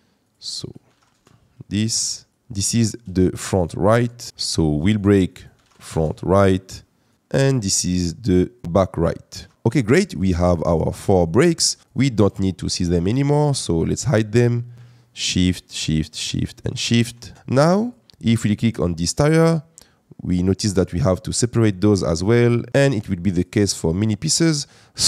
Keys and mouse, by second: 4.3-5.9 drag, 10.6 click, 10.9 click, 11.8 click, 12.6 click, 15.1 shift+click, 15.7 shift+click, 16.2 shift+click, 16.7 shift+click, 22.8 click, 23.4 click.